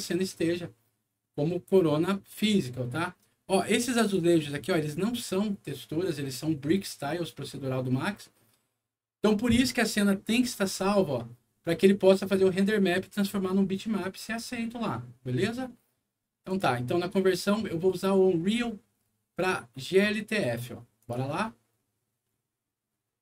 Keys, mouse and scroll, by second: 3.8 click, 16.4 click, 20.9 click.